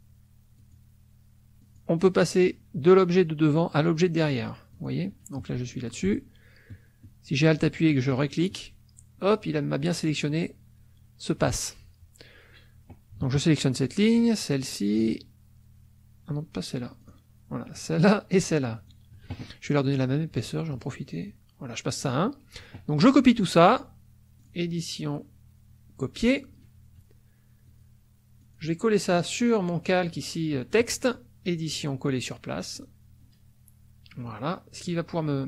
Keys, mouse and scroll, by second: 0.6 alt+click, 1.6 alt+click, 3.8 alt+click, 4.7 alt+click, 8.1 alt+click, 14.2 shift+click, 17.0 shift+click, 17.7 shift+click, 18.7 shift+click, 20.4 right click, 21.2 click, 24.4 click, 26.2 click, 27.7 click, 28.4 click, 31.7 click, 32.8 click.